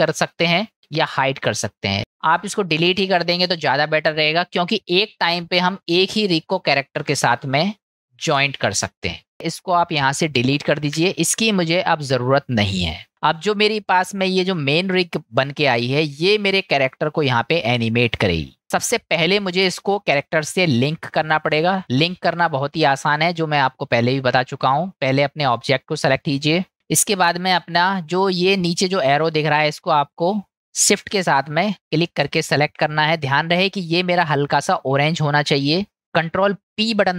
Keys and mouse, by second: 2.4 click, 3.1-4.6 middle drag, 5.3-5.8 middle drag, 11.0 Delete, 13.6 click, 14.6-19.9 middle drag, 21.5 click, 23.6-24.2 middle drag, 25.6-26.7 middle drag, 33.1-33.5 middle drag, 35.7-36.0 middle drag, 36.6 ctrl+p.